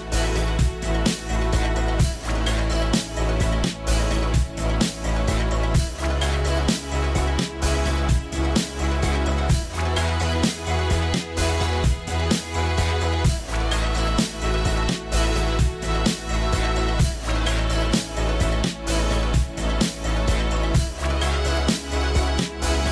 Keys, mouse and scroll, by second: 2.7 scroll up 1, 3.2 scroll down 1, 12.3 scroll up 1, 12.7-14.0 scroll down 1.